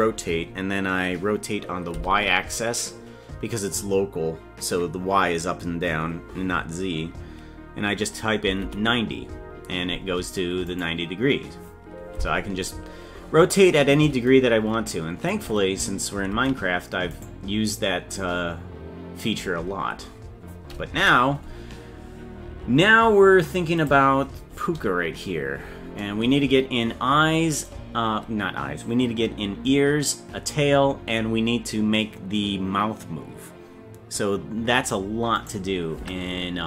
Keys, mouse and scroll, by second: 14.4-14.9 scroll down 4, 16.3 ctrl+Tab, 17.1 right click, 21.0 KP_Decimal, 23.8 click, 35.4 right click, 36.0 Tab.